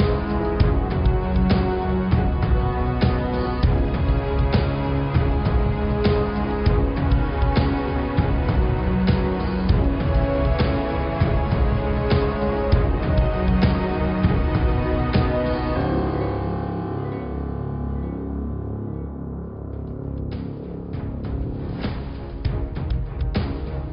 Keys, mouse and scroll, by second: 0.7 click, 1.2 middle click, 2.0 click, 2.6 middle click, 3.3 shift+a, 14.2 click, 16.0 middle click, 16.8 click, 17.9 click, 18.6 click, 19.3 g, 20.4 click, 21.3 g, 23.4 click.